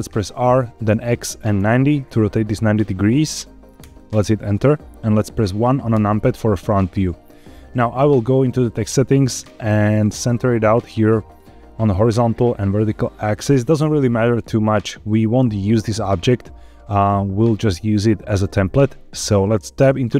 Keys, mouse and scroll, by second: 0.2 r, 0.8 x, 1.5 KP_9, 3.2 KP_0, 3.7 KP_Enter, 5.9 KP_1, 7.0 scroll up 4, 8.4 click, 9.9-11.3 drag, 12.0-13.2 drag, 14.3-15.0 scroll up 4, 19.7 Tab.